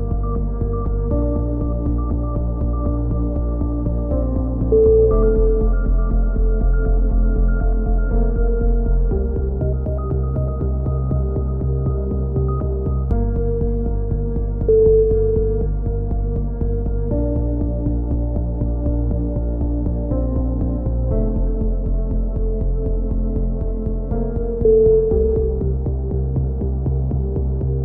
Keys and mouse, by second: 0.8 click, 1.9 a, 2.1 z, 3.9 click, 4.1 z, 4.8 click, 5.3 x, 6.5 z, 7.0 z, 7.4 click, 8.2-9.5 middle drag, 9.5 click, 10.9 click, 11.7-12.7 middle drag, 12.4-13.4 drag, 14.0-15.4 right drag, 15.1 click, 16.1-17.9 drag, 17.0 right click, 18.1 a, 18.3-20.5 middle drag, 20.6-21.9 middle drag, 22.1 right click, 22.9 middle click, 23.4 click, 26.4 click, 27.6 middle click.